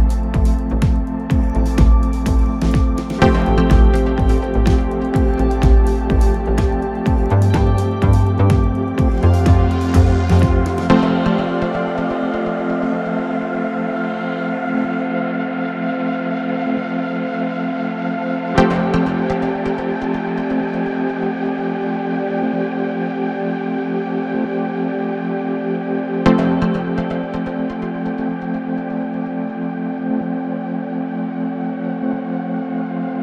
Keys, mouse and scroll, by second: 0.5 g, 3.2 KP_7, 3.6-4.3 scroll down 1, 4.3 shift+d, 6.4 shift+d, 8.1 shift+d, 9.8 shift+d, 11.3 shift+d, 12.8 shift+d, 14.4 shift+d, 16.0 shift+d, 18.0 shift+d, 19.5 shift+d, 21.3 shift+d, 25.1 shift+d, 27.2 shift+d, 29.1 scroll down 1, 29.3-30.9 middle drag, 30.9 click, 31.7 shift+d.